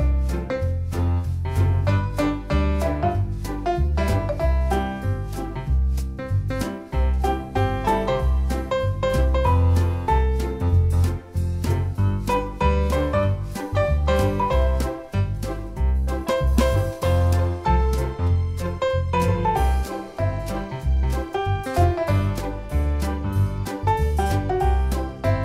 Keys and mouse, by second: 0.2 alt+BackSpace, 1.7 click, 2.4 click, 3.5 click, 4.6 space, 4.7 click, 4.9 space, 5.7 click, 7.7 click, 8.5-10.0 typing, 10.0 click, 14.2 click, 17.1-18.9 typing, 17.9 click, 18.3 ctrl+z, 19.9 click, 21.1 click, 22.1 click, 23.9 click, 24.8 space, 24.9 click, 25.0 space.